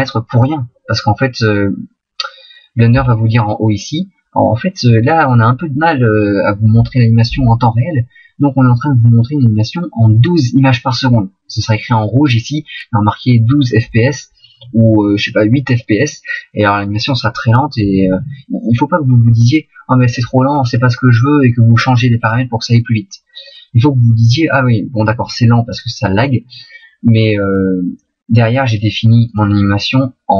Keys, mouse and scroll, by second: 29.3 click.